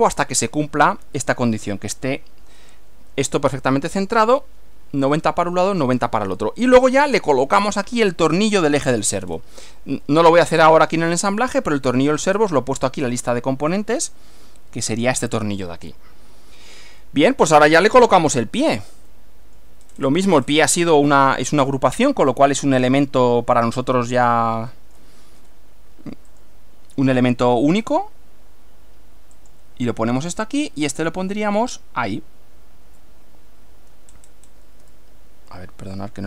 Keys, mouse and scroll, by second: 3.4-4.3 middle drag, 6.5-7.6 middle drag, 9.2-9.6 scroll down 1, 10.1-11.1 middle drag, 11.2 middle click, 12.6-13.3 shift+middle drag, 15.7-17.0 middle drag, 18.1 shift+middle click, 19.1-19.8 shift+middle drag, 19.8 scroll up 2, 20.0 scroll down 1, 20.4 scroll up 2, 20.8-21.9 shift+middle drag, 22.5 click, 24.0-25.2 middle drag, 26.3 click, 29.4 click, 34.1-34.6 scroll up 1, 35.0-36.2 shift+middle drag.